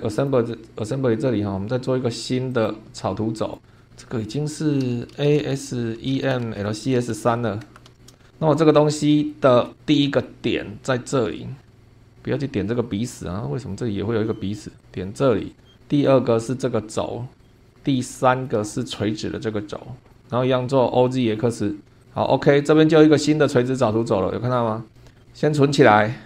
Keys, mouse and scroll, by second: 0.1 click, 2.5 click, 3.3 click, 4.8 Home, 4.9-7.9 typing, 7.1 End, 7.9 Return, 8.7-9.0 scroll up 2, 9.3 shift+middle click, 9.9 scroll up 2, 10.2 middle click, 11.6 middle click, 13.2-13.9 scroll up 3, 14.8 click, 15.7 scroll down 1, 17.4 click, 17.7-18.7 shift+middle drag, 18.8-19.5 shift+scroll down 1, 20.1 click, 22.0 click, 22.6-23.8 middle drag, 23.9 scroll up 1, 25.2 click.